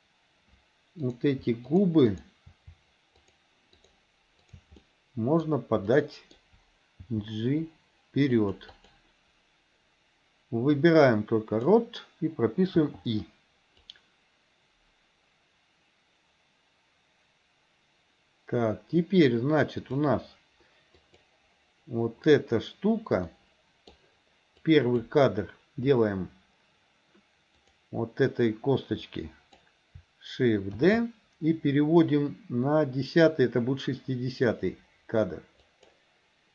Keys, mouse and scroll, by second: 1.0 click, 2.2 shift+click, 3.3 shift+click, 3.8 shift+click, 4.4 shift+click, 4.9-5.5 middle drag, 6.0 middle click, 7.2 g, 8.9 click, 10.8-11.8 drag, 13.9-20.0 drag, 21.1 click, 23.4-24.0 middle drag, 24.7-25.0 drag, 27.7 click, 29.0 click, 30.9 shift+d.